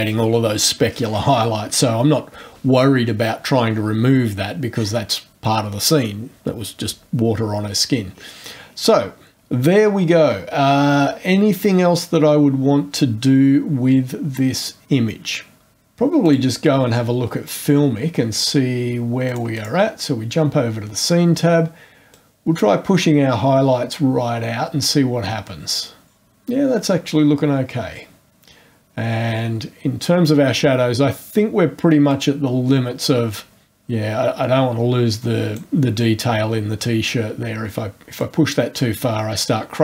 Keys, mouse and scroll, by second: 7.1 scroll down 1, 8.1-8.9 scroll down 3, 16.2 click, 17.4 click, 19.2-19.8 drag, 22.1-26.2 drag, 32.1-35.7 drag, 38.2-39.8 drag.